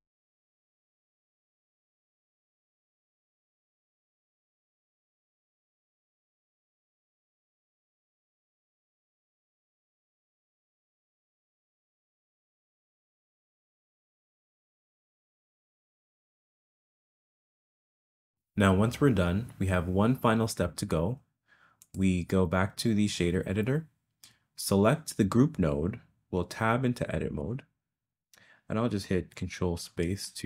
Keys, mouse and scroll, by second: 0.1 shift+click, 0.6 click, 0.8 click, 0.9 ctrl+click, 1.1 click, 1.2 ctrl+click, 1.5 ctrl+click, 1.7 click, 1.7 ctrl+click, 2.0 click, 2.1 click, 2.4 click, 2.6 ctrl+click, 2.8 click, 3.1 ctrl+click, 3.3 click, 3.4 click, 3.5 click, 3.7 ctrl+click, 4.1 click, 4.5 click, 4.6 click, 5.1 click, 5.3 click, 6.2 click, 6.6 click, 7.0 click, 7.5 click, 7.8 click, 8.1 click, 8.7 ctrl+click, 9.0 click, 9.1 click, 9.4 click, 9.4 click, 9.6 click, 9.6 ctrl+click, 9.9 ctrl+click, 10.1 click, 10.3 click, 10.4 click, 10.6 ctrl+click, 11.0 click, 11.0 click, 11.4 Down, 11.5 Up, 11.8 click, 12.1 click, 12.4 click, 12.6 click, 12.9 click, 13.2 click, 13.3 click, 13.4 click, 13.5 click, 13.7 click, 13.8 click, 13.9 click, 14.0 click, 14.2 ctrl+click, 14.4 click, 14.5 click, 14.7 ctrl+click, 14.8 click, 14.9 click, 15.1 ctrl+click, 15.4 click, 15.5 click, 16.1 click, 16.2 click, 16.4 click, 16.6 click, 16.7 click, 17.0 click, 17.4 click, 17.5 click, 17.9 click, 17.9 click, 18.1 click, 21.8 click, 27.5 Tab.